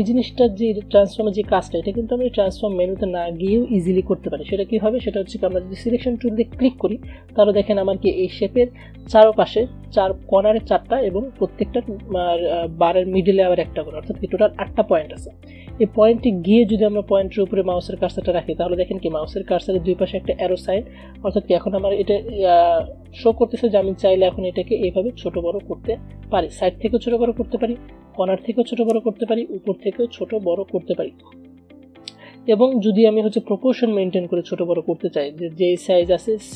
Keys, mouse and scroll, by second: 0.1 click, 23.8-36.5 drag.